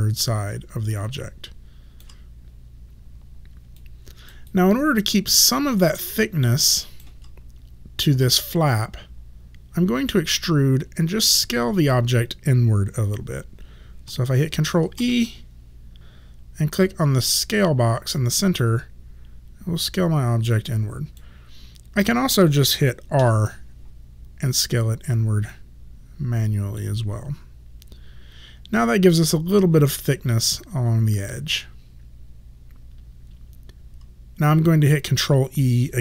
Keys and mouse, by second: 3.8 alt+click, 4.6 alt+right click, 5.6 alt+middle click, 6.2 alt+right click, 15.1 ctrl+e, 16.0 ctrl+z, 18.2 click, 23.2 r, 25.6 click.